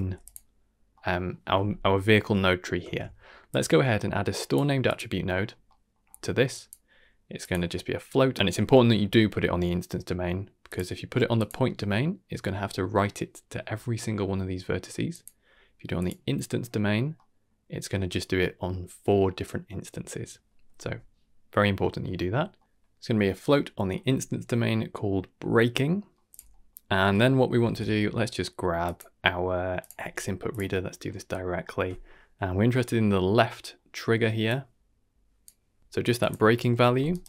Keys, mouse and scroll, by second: 0.0 g, 0.7 scroll down 1, 0.9 middle click, 2.2 middle click, 2.8 shift+a, 5.3-7.4 scroll up 5, 5.6 middle drag, 6.5 click, 8.5-9.6 drag, 10.6-11.4 drag, 11.7 scroll down 2, 13.6-14.1 scroll down 1, 15.1-16.0 drag, 17.1 middle drag, 22.6 middle click, 22.9 click, 22.9-24.0 scroll up 3, 22.9 typing, 25.9 middle click, 26.3 click, 26.5 middle click, 27.0 middle click, 27.6 shift+a, 30.8-31.3 scroll down 2, 31.0 middle click, 32.1-32.7 scroll down 2, 32.7 middle click, 33.2 middle click, 33.6 middle click, 34.4-35.4 drag, 35.8 click, 35.9 ctrl+g, 35.9 ctrl+z, 36.1 Tab, 36.1 click, 36.1 KP_Decimal, 36.6 ctrl+h, 37.0 middle drag.